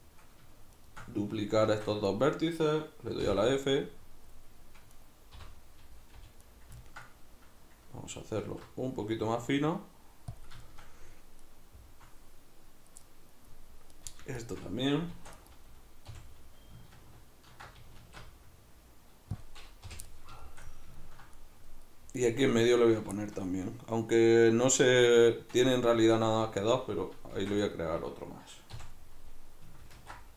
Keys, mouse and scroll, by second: 0.7 shift+right click, 1.6 shift+d, 2.2 right click, 3.2 f, 3.7-4.9 middle drag, 4.9 right click, 5.4 l, 6.5 right click, 6.8-13.9 ctrl+middle drag, 8.5 alt+s, 10.4 click, 13.9 right click, 14.4 shift+right click, 15.1 shift+d, 15.5 right click, 16.1 f, 18.0 alt+s, 19.5 click, 19.9 o, 20.1-22.2 middle drag, 22.2 right drag, 22.8 shift+right click, 23.2-27.7 shift+middle drag, 27.4 shift+d, 27.7 right click, 28.7 f, 29.9 ctrl+alt+s.